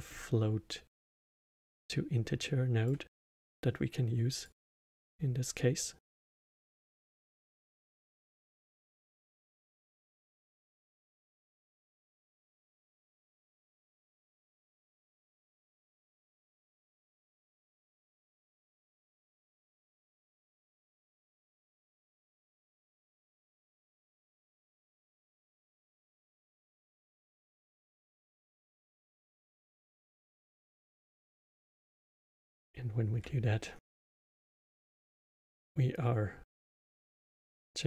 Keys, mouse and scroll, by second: 1.6 middle click, 2.4 click, 3.5-5.2 drag, 6.7 drag, 9.1 click, 9.9 shift+d, 11.5 click, 11.6 click, 12.0 drag, 13.8 click, 14.3-15.5 middle drag, 15.5 drag, 17.2 drag, 18.3 middle click, 18.7 scroll down 2, 19.1 click, 19.5 middle click, 20.0 shift+d, 21.0-23.9 middle drag, 23.9 click, 26.0 click, 27.2-27.7 middle drag, 28.5 click, 30.2-30.8 middle drag, 30.8 scroll down 1, 31.6-34.6 alt+middle drag, 34.6 click, 35.4-37.8 alt+middle drag.